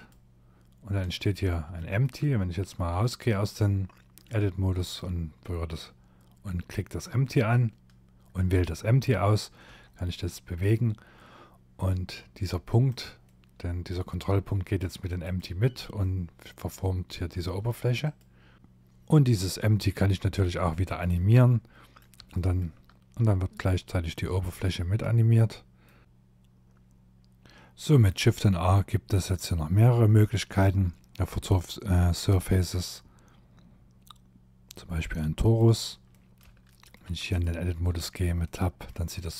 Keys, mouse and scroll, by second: 0.2 shift+middle click, 0.9 shift+middle click, 1.7 Tab, 3.8 click, 12.3 middle click, 13.3 g, 14.5 scroll down 5, 15.0 middle click, 15.9-16.4 scroll up 3, 16.4 g, 18.6 middle click, 19.8 shift+middle click, 20.4 middle click, 21.4 shift+middle click, 22.7 middle click, 24.1 middle click, 35.2 middle click, 35.7 shift+middle click, 36.3 click, 36.7 scroll up 4, 37.0 Tab, 37.5 middle click, 38.1 middle click, 39.1 shift+middle click.